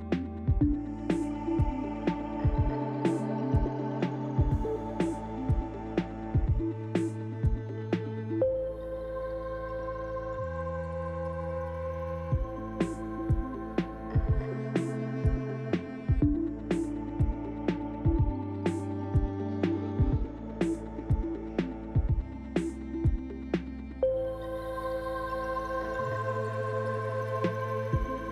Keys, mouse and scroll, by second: 0.5 middle click, 2.5 click, 7.7 click, 8.1 middle click, 10.0 scroll down 1, 10.7 shift+middle click, 12.2 ctrl+s, 12.7 scroll up 3, 13.3 shift+middle click, 14.3 click, 15.5 click, 16.3 Tab, 16.9-17.4 scroll up 3, 17.4 click, 17.9 click, 18.8 KP_Decimal, 19.8 middle click, 22.4 click, 24.4 click, 27.1 o.